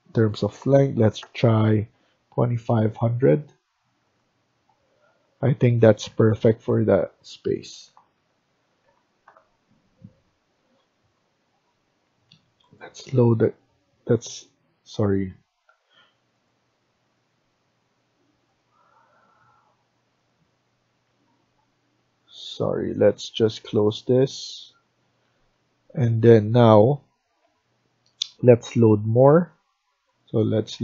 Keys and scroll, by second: 0.2-1.4 typing, 5.8 Escape, 6.1 Escape, 7.6 Down, 7.8 Down, 8.1 Right, 8.8 Left, 21.0 shift+Escape, 25.1 Escape, 25.4 Escape.